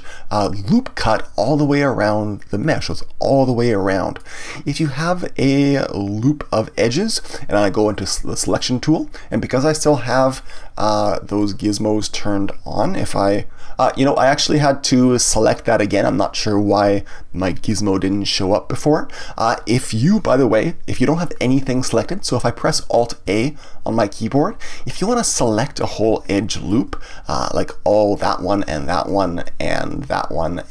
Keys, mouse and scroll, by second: 2.6-5.6 middle drag, 8.4 click, 11.3-15.0 drag, 23.2 alt+a, 25.0-28.0 middle drag, 28.0 click, 28.9 shift+click, 29.4 middle click, 30.0 shift+click, 30.5 middle click.